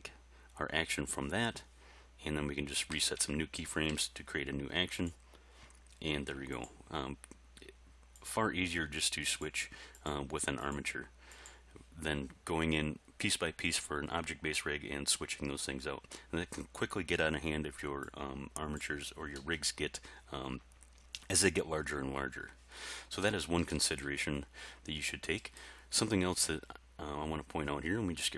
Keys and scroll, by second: 2.9 a, 3.9 i.